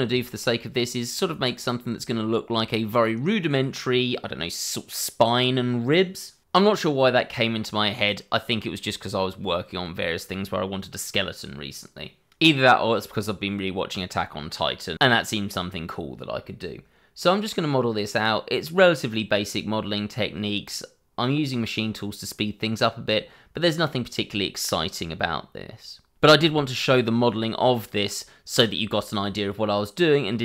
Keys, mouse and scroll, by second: 0.2 shift+middle click, 0.3 click, 0.4 middle click, 0.7 s, 1.0 click, 1.1 shift+middle click, 1.2 middle click, 1.4 s, 2.0 shift+middle click, 2.0 scroll up 1, 2.1 middle click, 2.2 Tab, 2.3 click, 2.6 g, 2.7 b, 3.2 click, 3.8 click, 3.9 middle click, 4.2 shift+middle click, 4.2 scroll up 1, 4.3 middle click, 4.4 Tab, 4.6 click, 4.8 middle click, 4.9 shift+middle click, 5.1 middle click, 5.3 shift+middle click, 5.3 middle click, 5.5-6.2 scroll up 2, 5.6 ctrl+b, 6.6 middle click, 6.7 shift+middle click, 6.8-7.5 scroll up 3, 7.0 click, 7.3 ctrl+r, 7.5 click, 7.9 alt+x, 8.2-8.6 scroll down 2, 8.3 middle click, 8.6 middle click, 8.7 Tab, 9.3 scroll down 1, 9.4 shift+middle click, 9.5 shift+a, 9.6 click, 10.1 click, 10.2 shift+middle click, 10.4 click, 10.4 double click, 10.6 6, 10.7 Return, 10.9 shift+click, 11.1 alt+a, 11.3 shift+middle click, 11.3 scroll up 1, 11.4 middle click, 11.6 click, 11.9-13.9 typing, 12.4 click, 12.9 Return, 13.6 Escape, 14.4 click, 14.5 middle click, 14.6 scroll up 1, 14.7 ctrl+a, 14.9 click, 15.0 shift+middle click, 15.0 Tab, 15.2 click, 15.5 g, 16.2 click, 16.8 click, 16.8 scroll down 1, 17.2 shift+middle click, 17.2 scroll up 1, 17.4 shift+middle click, 17.6 Tab, 17.7 middle click, 17.9 shift+middle click, 18.0 g, 18.8 click, 18.9 shift+middle click, 19.0 scroll up 1, 19.2 s, 19.4 click, 19.7 Escape, 20.0 s, 20.2 shift+z, 21.5 shift+z, 22.0 Escape, 22.2 s, 22.8 shift+x, 23.2 click, 23.3 Tab, 24.0 click, 24.1 scroll down 1, 24.2 middle click, 24.3 Tab, 24.6 scroll up 1, 24.8 scroll down 1, 24.9 ctrl+r, 25.1 scroll up 1, 25.4 Return, 25.6 Escape, 26.3 ctrl+r, 26.4-26.9 scroll up 1, 26.9 1, 27.1 8, 27.4 Escape, 27.5 shift+middle click, 27.8 scroll up 1, 27.9 Tab, 28.0 click, 29.2 s, 29.4 scroll up 1, 30.3-30.4 scroll down 1.